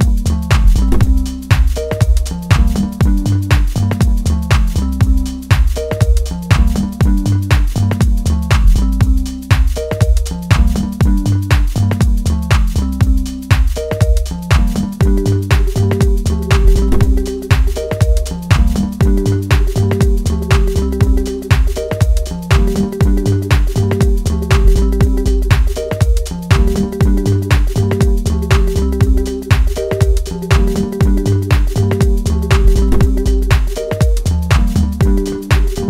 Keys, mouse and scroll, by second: 0.6 Tab, 0.9 Tab, 1.2 middle click, 1.8 Tab, 2.3 click, 2.8 Tab, 3.8 click, 5.0 i, 6.4 e, 9.0 click, 9.4-10.0 scroll down 3, 10.0 scroll up 1, 10.3 Tab, 10.6 shift+middle click, 11.5-12.8 scroll down 2, 12.8-14.1 drag, 14.1-14.9 scroll down 1, 14.9 g, 17.2 g, 19.0 s, 20.7 g, 22.6 scroll down 2, 22.8-23.7 scroll up 5, 23.7 click, 24.6 scroll down 3, 24.8 middle click, 25.6 click, 26.1 s, 28.8 s, 30.0 Tab, 31.8 ctrl+r, 33.2 click, 34.2 click, 35.1 s.